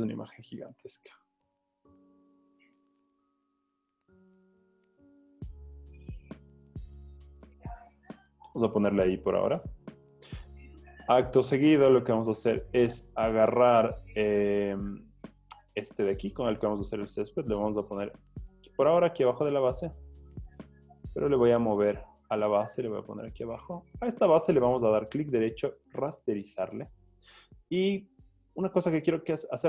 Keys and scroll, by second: 4.4 Return, 6.5 z, 8.6 z.